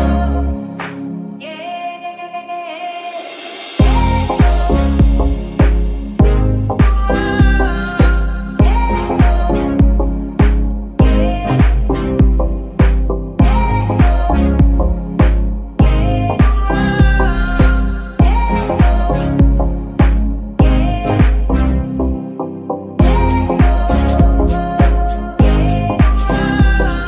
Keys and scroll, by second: 0.5 g, 0.9 Escape, 3.6 g, 4.0 Escape, 4.2 r, 4.5 x, 5.0 Escape, 11.3 g, 12.2 Escape, 15.0 g, 18.5 Escape, 23.2 g, 23.4 Escape, 24.0 r, 24.2 x, 24.8 Escape.